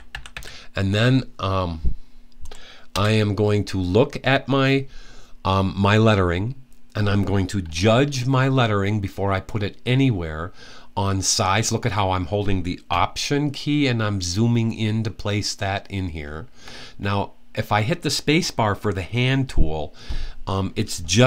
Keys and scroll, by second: 0.0-0.6 typing.